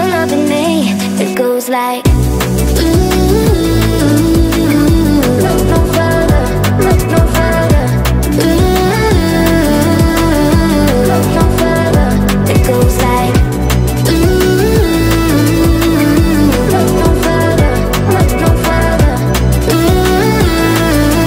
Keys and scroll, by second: 1.4 Return, 2.6 Caps_Lock, 2.6-4.8 typing, 6.4 2, 7.4 6, 12.9-13.8 typing.